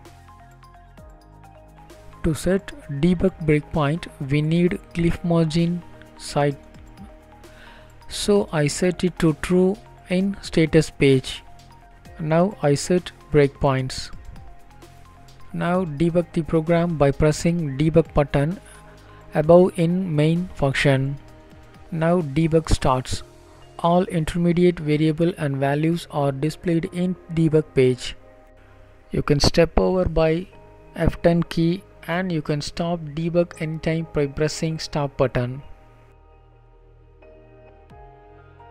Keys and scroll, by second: 1.7 Left, 2.1 BackSpace, 5.7 ctrl+s.